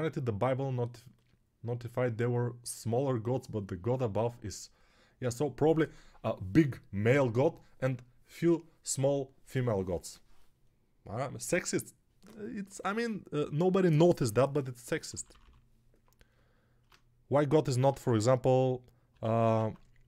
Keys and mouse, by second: 15.0 ], 15.2 ], 15.3 ], 17.7 alt+q, 19.6 alt+q.